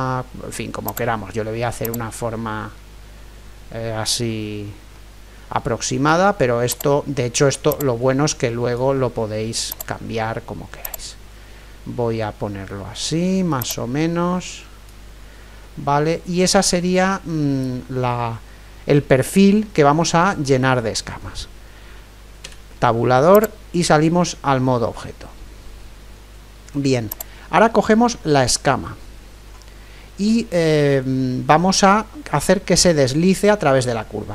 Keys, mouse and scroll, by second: 0.9-3.8 right drag, 1.8-3.8 drag, 6.7-8.7 right drag, 7.7-9.6 drag, 9.7-11.6 right drag, 10.8-12.7 drag, 13.6-15.5 drag, 15.6-18.0 middle drag, 20.4-22.3 middle drag, 22.5 Tab, 23.9-25.9 middle drag, 27.1-29.8 right drag, 27.9-34.3 middle drag.